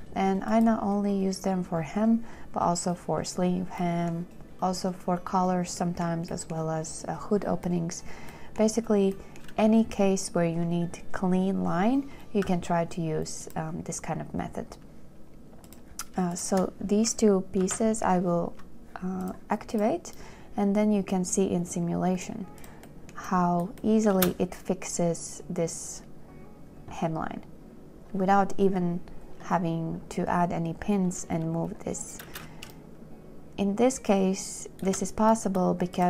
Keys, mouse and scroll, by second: 16.6 shift+click, 17.9 ctrl+j, 22.1 click, 24.5 space, 32.6 space, 33.1 shift+click.